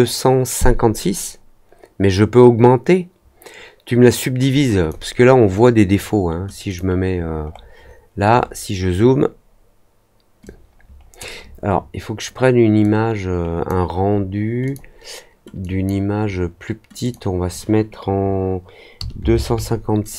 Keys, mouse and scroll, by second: 6.6 click, 7.4 middle click, 8.3 middle click, 10.4 click, 12.7 click, 14.6 click, 15.5 click, 17.0 click.